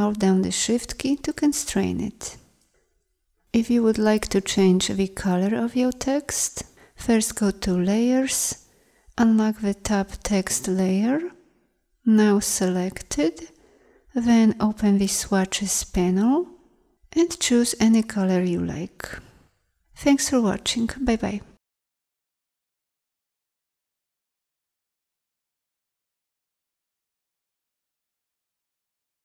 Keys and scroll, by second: 21.9 ctrl+z.